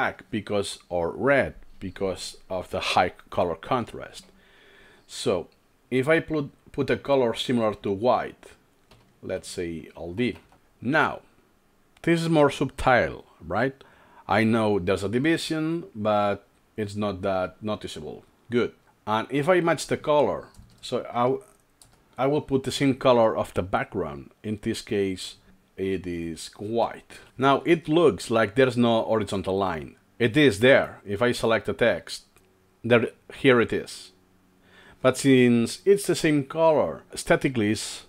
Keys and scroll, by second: 9.0 ctrl+alt+3, 10.0-11.0 typing, 20.7 BackSpace, 21.3 BackSpace, 22.2 BackSpace, 27.3 alt+Right, 27.3 alt+Left.